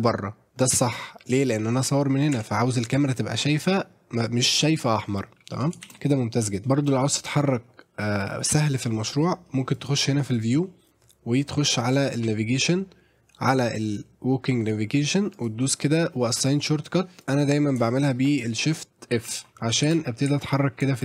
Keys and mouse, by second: 1.0 middle click, 1.6 middle click, 2.3 Tab, 2.7-3.0 middle drag, 5.5 middle click, 5.9 shift+f, 6.4 middle drag, 6.9-9.0 middle drag, 9.7-19.5 drag, 19.6 middle click, 19.9-21.0 typing.